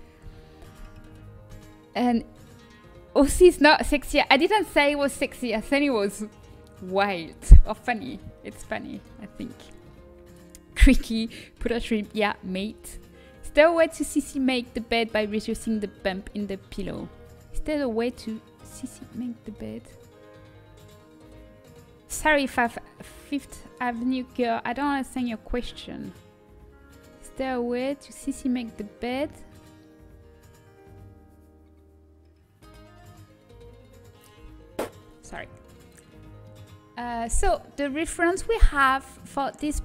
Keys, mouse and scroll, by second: 35.9-39.3 middle drag.